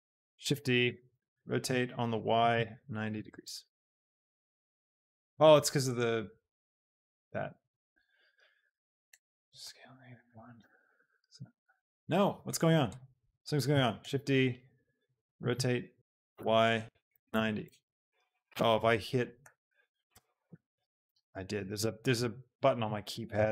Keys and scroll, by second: 0.4 shift+d, 1.2 r, 2.6 y, 3.0 Page_Up, 3.4 Return, 8.9 shift+d, 9.3 Escape, 9.7 s, 10.0 KP_Subtract, 10.4 End, 10.8 Return, 11.5 g, 12.2 x, 13.7 shift+d, 14.1 Escape, 15.5 r, 16.3 y, 17.0 Page_Up, 17.4 Insert, 17.7 Return, 18.8 Num_Lock, 19.6 r, 20.7 KP_9, 21.0 Return, 22.5 ctrl+z.